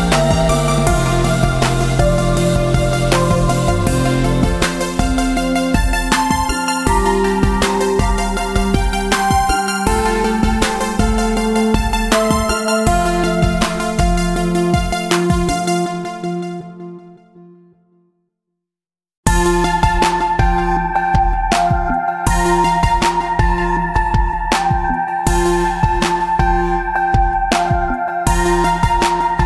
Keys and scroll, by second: 6.7 v, 11.4 Tab, 12.6 space, 17.0 ctrl+alt+z.